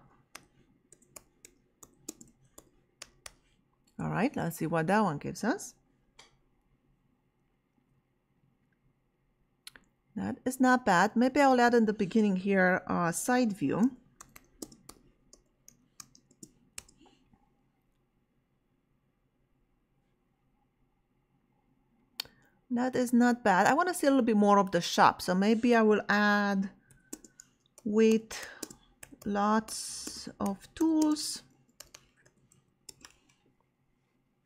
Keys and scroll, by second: 0.0-3.7 typing, 3.8 Return, 13.3-16.5 typing, 16.8 Return, 26.6-33.0 typing.